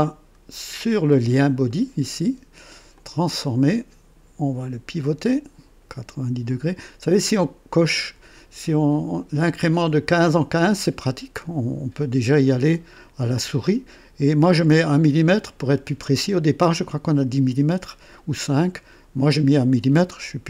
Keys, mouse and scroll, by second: 1.6 right click, 2.9 click, 5.0-6.7 drag.